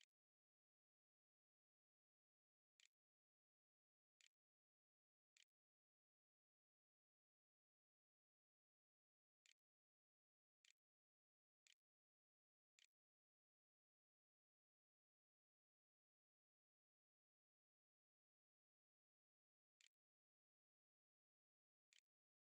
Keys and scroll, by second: 1.1-5.4 typing, 8.1-15.2 typing, 20.2-22.4 typing.